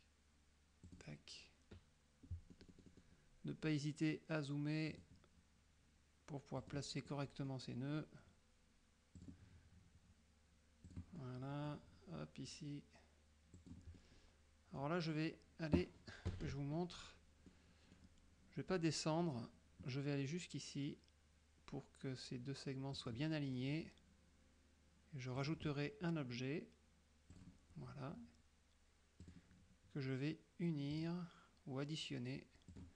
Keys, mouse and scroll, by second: 0.9 click, 2.6 middle click, 5.0 click, 6.7 click, 7.2 middle click, 9.3 click, 10.9 click, 11.3 middle click, 13.7 click, 14.0-15.1 middle drag, 16.4 KP_Subtract, 17.6 middle click, 23.1 click, 25.5 click, 27.4 click, 29.3 click, 31.0 click, 32.8 click.